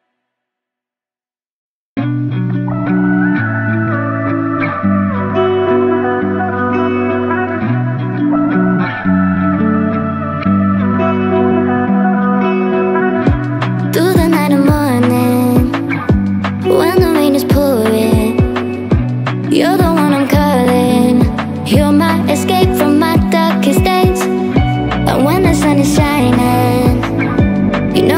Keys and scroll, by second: 0.1 Return, 2.8 0, 3.2 1, 21.1-26.8 typing, 26.6 Return.